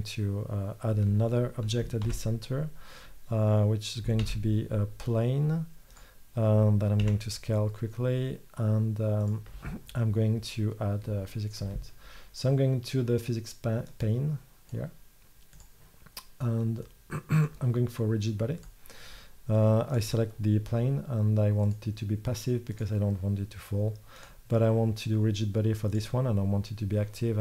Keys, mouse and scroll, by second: 2.1 shift+c, 4.3 shift+a, 7.1 s, 10.9-14.1 middle drag, 20.0-23.1 middle drag, 26.0-27.1 drag.